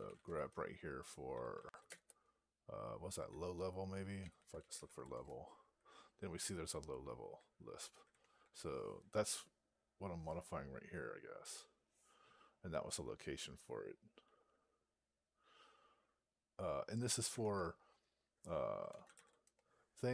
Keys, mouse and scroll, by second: 11.3 click, 13.0 Up.